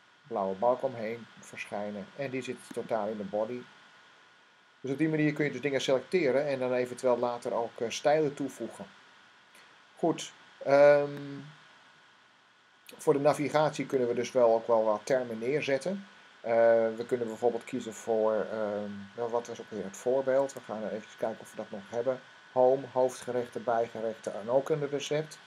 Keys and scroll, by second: 20.2 Tab, 24.7 Tab.